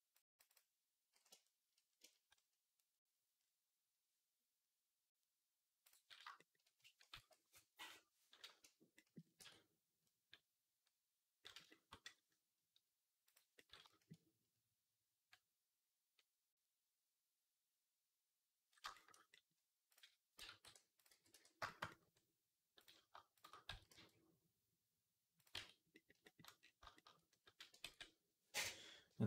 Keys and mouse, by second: 1.6-6.8 shift+middle drag, 7.0 ctrl+s, 9.2 Tab, 9.9-19.8 drag, 9.9-23.0 right drag, 13.7-19.8 shift+middle drag, 20.2 x, 20.9 x, 23.5 s, 25.4 Tab, 26.1-29.2 right drag, 27.7 ctrl+s.